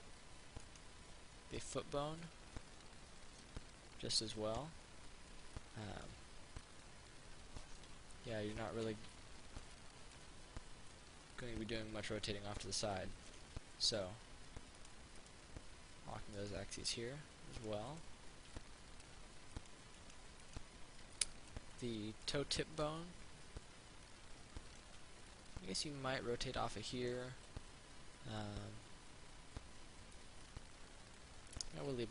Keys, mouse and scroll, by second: 0.9 right click, 2.6-5.3 drag, 5.8 alt+click, 6.8 click, 9.0 ctrl+z, 9.4 alt+click, 9.8 alt+click, 11.2-13.5 drag, 14.1 ctrl+z, 15.0 click, 16.6 right click, 17.8 click, 18.8 alt+click, 19.8 click, 20.2 right click, 21.4 alt+click, 22.1 alt+click, 24.3-27.4 drag, 28.0 ctrl+z, 30.6 click, 31.8 ctrl+z.